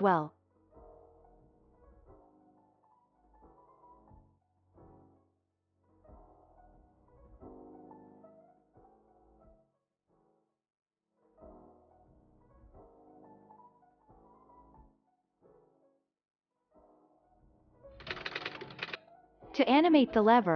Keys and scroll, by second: 1.1 ctrl+a, 2.1 End, 2.5 alt+], 3.5 Home, 5.6 ctrl+s, 6.5 space, 19.5 space.